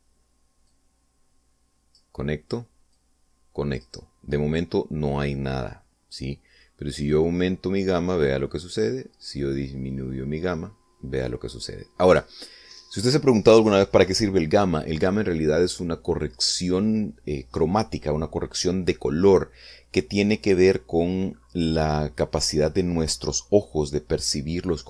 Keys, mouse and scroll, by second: 0.1 click, 1.4-2.9 drag, 3.7 click, 7.8-13.1 drag.